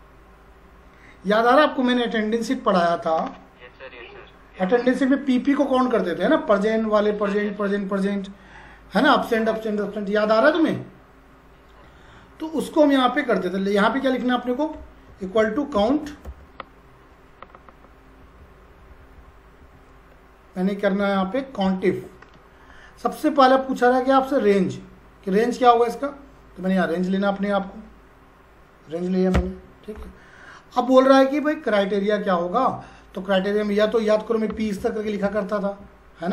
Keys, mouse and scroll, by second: 14.8-16.7 typing, 18.2 Down, 18.7 Up, 19.1 Down, 19.6 Up, 21.0 Down, 21.9 Tab, 26.7 click, 29.3 ,, 34.1-35.7 typing.